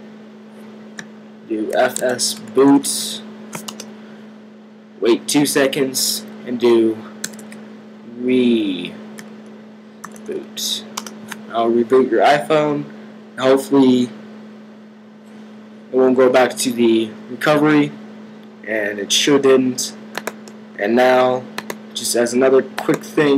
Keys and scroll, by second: 1.3-3.3 typing, 6.9-7.7 typing, 9.0-10.7 typing.